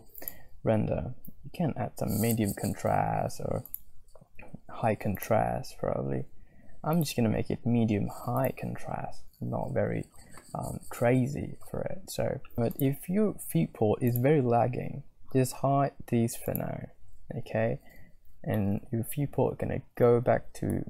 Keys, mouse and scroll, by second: 0.2-2.9 drag, 4.0-5.9 drag, 7.2-9.0 drag, 12.5 z, 14.2 click, 17.3 z, 18.6-20.1 middle drag, 20.3 click, 20.5 middle click, 20.6 click.